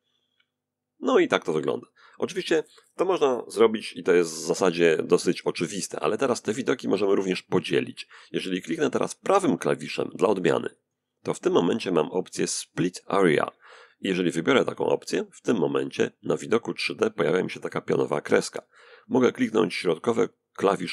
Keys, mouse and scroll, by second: 10.0 right click, 13.8 click, 20.1 middle click.